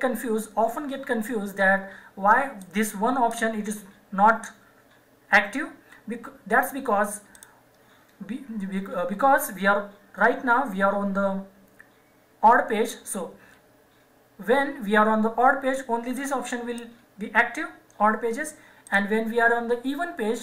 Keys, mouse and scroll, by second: 2.5 click, 7.3 click, 16.1 click, 18.9 click.